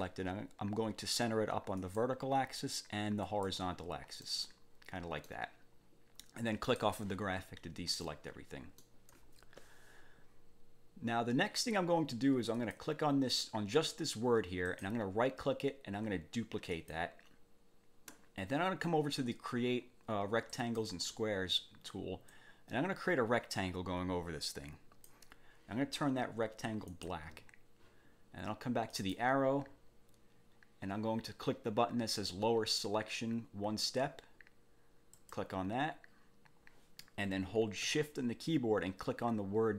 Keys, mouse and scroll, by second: 1.8 click, 3.3 click, 4.3-5.5 drag, 6.7 click, 8.1 click, 12.5 click, 14.7 right click, 16.7 click, 20.5 click, 22.3-25.3 drag, 26.9 click, 28.9 click, 35.1 click.